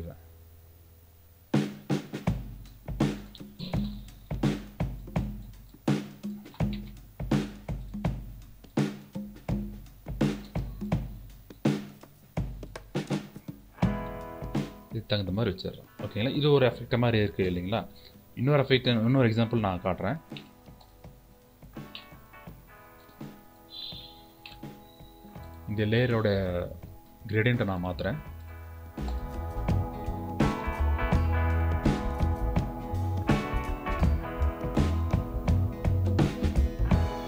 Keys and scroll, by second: 4.6 e.